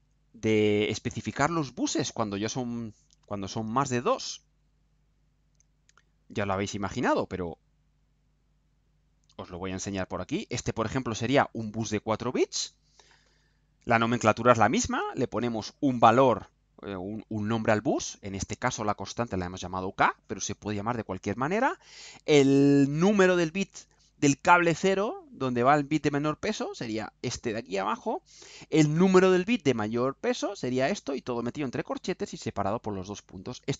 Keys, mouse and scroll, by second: 4.6 click, 6.2 click, 6.7-7.7 scroll down 2, 8.2-10.0 drag, 10.3 scroll down 2, 11.0 scroll down 2.